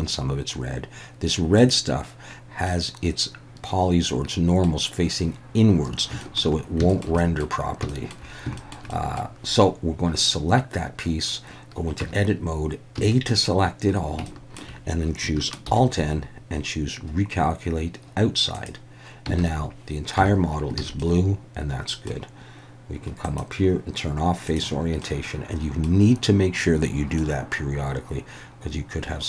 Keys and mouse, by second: 1.6 click, 2.7-4.6 middle drag, 6.2 shift+middle click, 6.9 shift+middle click, 7.2 middle drag, 7.9 shift+middle click, 8.6 shift+middle click, 8.9 middle click, 12.0 Tab, 13.0 a, 14.3 shift+middle click, 15.7 alt+n, 19.4 alt+a, 20.2 Tab, 20.8 alt+a, 21.0-22.1 middle drag, 23.3-24.7 drag, 25.0-25.9 middle drag, 27.2-29.2 middle drag.